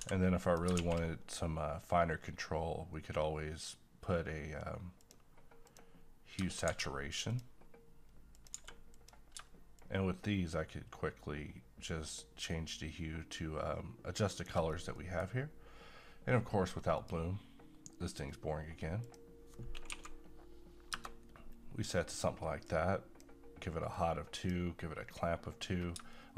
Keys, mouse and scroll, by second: 0.1 x, 0.5 click, 0.8 shift+a, 5.0 click, 6.7 d, 7.3 click, 8.5 g, 9.0 click, 9.8-14.7 drag, 14.7 scroll down 1, 14.9 middle click, 15.3-16.1 scroll up 1, 17.0 click, 19.9 2, 22.7 click, 23.9-25.7 drag, 25.7 scroll down 1, 26.1 middle click.